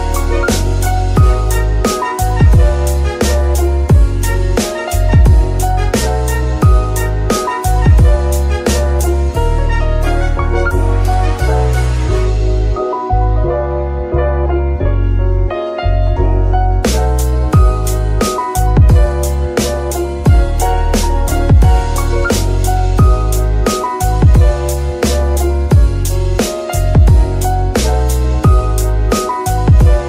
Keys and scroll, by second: 10.1 g, 24.6 KP_7, 27.3 Tab.